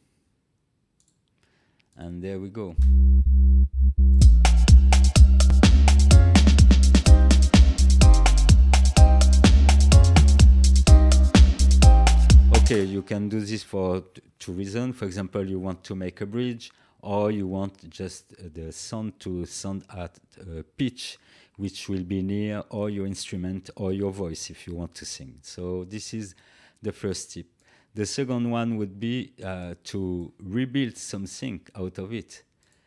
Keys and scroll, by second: 2.7 space, 12.6 space.